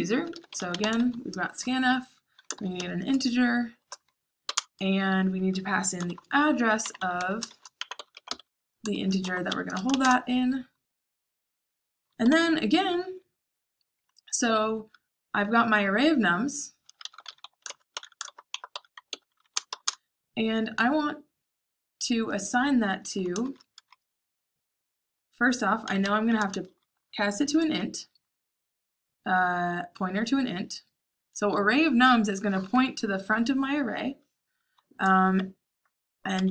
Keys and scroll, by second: 0.0-1.4 typing, 2.4-10.0 typing, 12.2 o, 16.5-19.4 typing, 23.4 shift+9, 25.5-27.4 typing, 36.3 Escape.